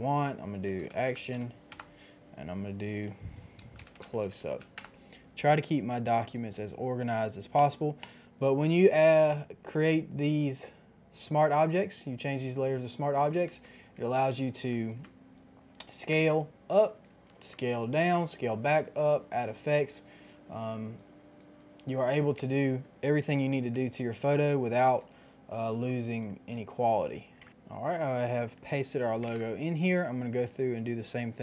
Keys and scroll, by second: 0.6-1.7 typing, 3.4-4.7 typing, 4.7 Return, 8.7 ctrl+t, 13.5 Return, 14.9 ctrl+t, 16.1 Return, 17.3 ctrl+t, 22.5 Return, 23.0 shift+Return, 27.0 KP_1, 27.1 KP_0, 27.3 KP_0, 27.4 Return, 29.3 Return, 29.3 KP_5, 29.3 KP_0.